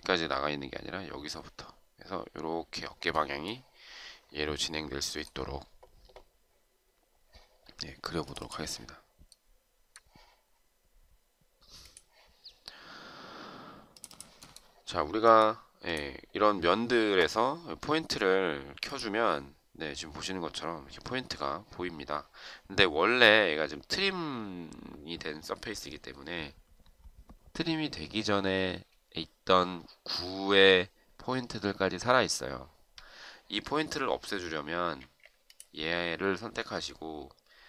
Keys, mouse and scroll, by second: 34.7 Escape.